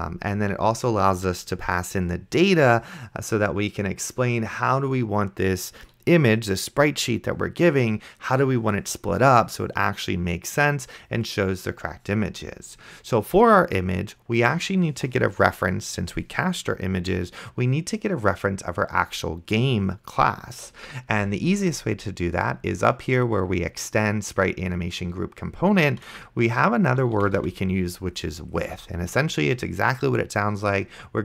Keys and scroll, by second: 26.9-28.6 typing.